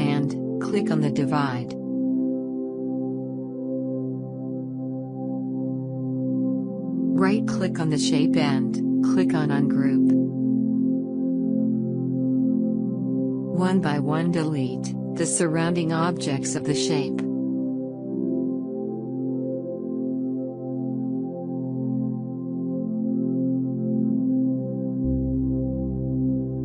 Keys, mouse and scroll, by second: 2.8 click, 9.2 right click, 11.0 click, 21.0 click, 24.0 click, 24.2 alt+scroll up 1, 24.4 space, 24.6 click, 24.6 space, 25.2 click, 25.8 shift+click.